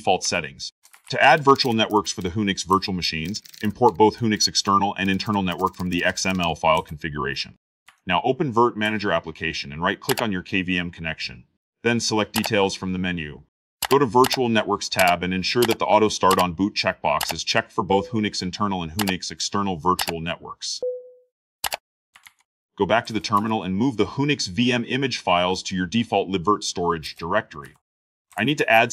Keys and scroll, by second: 0.0-1.9 typing, 2.1 ctrl+shift+v, 2.5 Return.